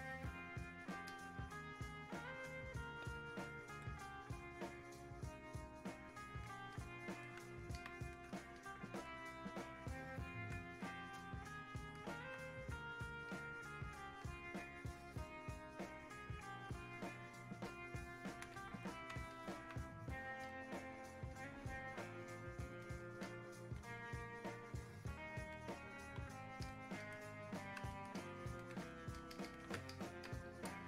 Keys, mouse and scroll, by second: 6.8 click, 7.8 alt+click, 8.6-9.9 alt+drag, 9.9-12.4 drag, 12.4 alt+click, 13.3-17.7 drag, 17.7-19.3 ctrl+drag, 21.4-23.3 ctrl+drag, 23.3 click, 24.3-28.2 ctrl+drag, 28.2-30.8 alt+drag.